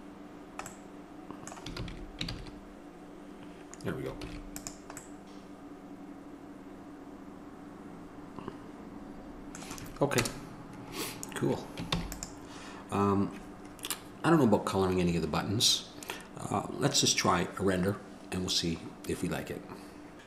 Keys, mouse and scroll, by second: 0.6 middle click, 2.3 ctrl+z, 2.9 ctrl+z, 10.4 KP_0, 12.2 ctrl+s.